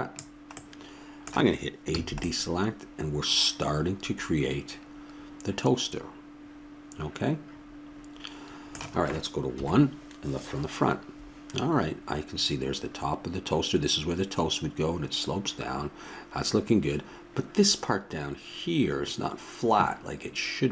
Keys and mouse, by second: 1.9 a, 9.5 KP_1.